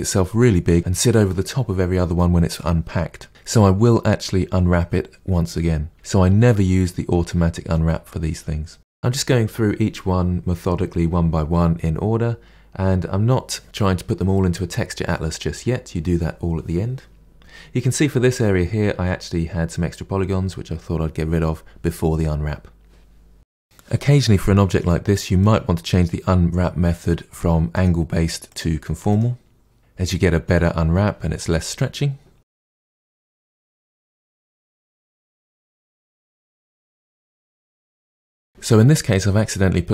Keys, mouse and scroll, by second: 3.4 3, 3.9 ctrl+e, 3.9 middle click, 4.3 2, 4.4 click, 4.7 ctrl+e, 4.8 a, 5.1 u, 5.4 KP_Divide, 5.8 middle click, 6.0 Tab, 6.1 click, 6.2 Tab, 6.4 KP_Divide, 6.5 middle click, 6.8 click, 7.1 ctrl+e, 7.1 middle click, 7.7 Tab, 7.8 KP_Divide, 8.2-9.4 drag, 9.4 Tab, 9.7 a, 10.0 u, 10.2-11.6 middle drag, 11.6 Tab, 11.6 click, 12.0 KP_Divide, 12.1-12.6 middle drag, 12.6 Tab, 12.6 a, 12.9 u, 13.0 Tab, 13.1 KP_Divide, 13.3-13.7 middle drag, 13.7 click, 13.8 middle drag, 14.0 click, 14.1 middle click, 14.2-15.2 scroll up 3, 14.3 shift+middle click, 15.2-16.2 middle drag, 16.2 3, 16.4 middle click, 16.6 shift+click, 17.2 Delete, 17.4 middle click, 17.6-20.4 typing, 17.8 click, 18.6 click, 19.1 middle click, 19.4 click, 20.2 click, 20.4-21.7 middle drag, 21.7 3, 21.8 click, 21.9 middle click, 22.1 shift+click, 22.5 ctrl+e, 22.6 a, 23.0 u, 23.6-32.4 drag, 32.4 scroll down 1, 32.4 Tab, 32.6 middle click, 32.6 Tab, 32.7-33.2 middle drag, 33.2 scroll up 1, 33.3-33.6 middle drag, 33.6 click, 33.8 shift+click, 33.9 shift+click, 34.3 shift+click, 34.4 ctrl+e, 34.6-34.9 middle drag, 34.9 click, 35.1 2, 35.2 click, 35.3 shift+click, 35.4 shift+click, 35.6 ctrl+e, 35.8 KP_Divide, 35.9 middle click, 36.1 scroll down 2, 36.2 middle click, 36.7 a, 36.9 u, 37.2 middle click, 37.9 a.